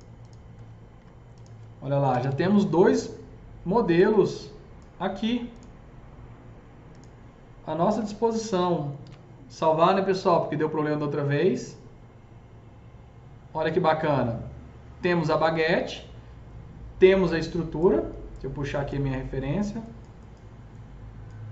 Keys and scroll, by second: 1.0 F3, 1.7-2.6 typing, 7.8 F3, 8.0 F4, 8.9 ctrl+s.